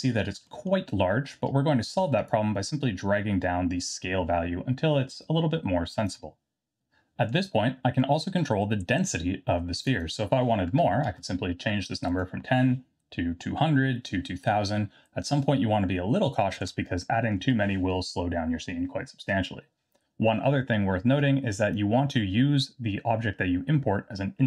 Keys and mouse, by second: 0.5 middle click, 2.3-6.1 shift+drag, 10.0-18.1 drag, 16.8 KP_0, 21.4-22.0 drag.